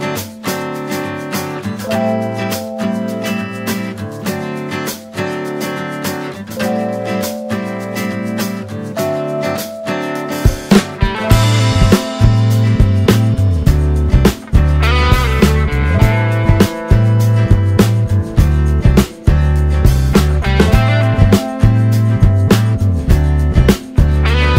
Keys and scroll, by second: 14.4 t.